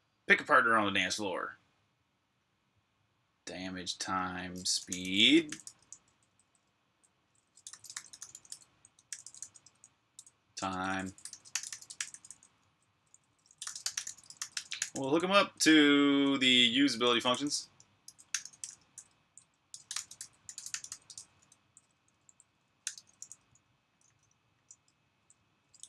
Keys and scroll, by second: 4.2-11.5 typing, 16.8-20.6 typing, 20.9 Escape, 21.7-22.6 typing, 23.9-24.3 typing.